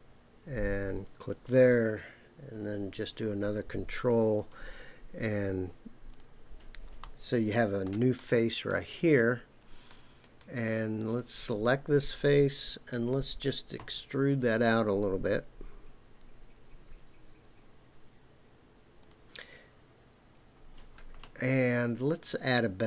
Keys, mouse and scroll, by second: 1.2 click, 3.1 ctrl+r, 6.1 click, 7.0 middle click, 11.1 click, 12.1 click, 13.8 e, 19.0 click.